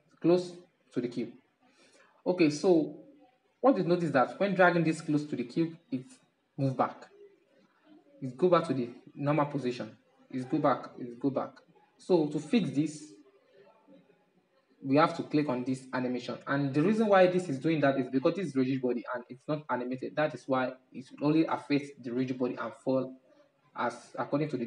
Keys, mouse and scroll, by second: 4.0-7.5 middle drag, 7.5-10.5 drag, 10.5-13.5 middle drag, 15.6-18.6 middle drag, 18.8-24.6 middle drag.